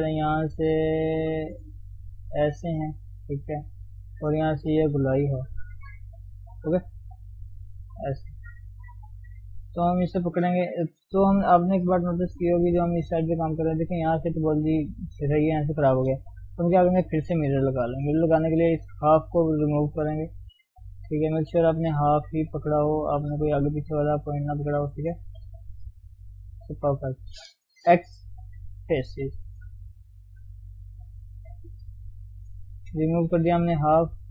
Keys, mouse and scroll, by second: 3.9-6.7 drag, 6.7 d, 7.1 click, 8.1 d, 8.5 shift+z, 9.1 click, 10.0 Tab, 10.8-11.5 scroll down 1, 11.5 scroll down 5, 11.6 KP_1, 12.0 middle click, 12.5-13.1 scroll up 1, 13.1 middle click, 13.6-14.1 scroll up 3, 14.1-15.9 middle drag, 15.9-16.4 scroll down 5, 16.4 KP_1, 16.8-17.2 scroll down 1, 17.2 shift+z, 17.3-18.4 scroll up 1, 18.4-19.2 scroll up 3, 19.4 click, 19.6 scroll up 1, 19.9 shift+z, 20.0 shift+middle click, 20.3-21.1 scroll up 3, 21.1 shift+middle click, 21.6-22.0 scroll up 1, 22.0-22.3 scroll down 1, 22.3-24.7 middle drag, 24.7 scroll down 1, 25.0-26.7 middle drag, 26.8-28.9 middle drag, 28.9 x, 29.1 middle click, 29.8-31.0 scroll up 1, 31.0 click, 32.3 alt+shift+click, 33.0 scroll down 2, 33.1-34.3 middle drag.